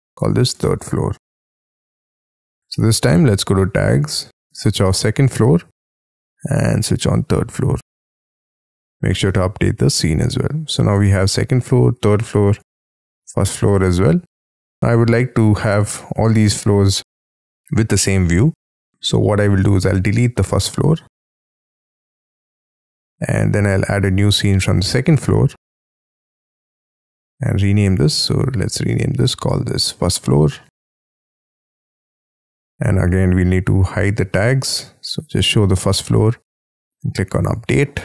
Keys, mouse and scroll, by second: 0.0-1.7 typing, 9.1 right click, 19.7 right click, 24.0 right click, 27.9 right click, 29.6-32.0 typing, 36.7 right click, 36.8 right click.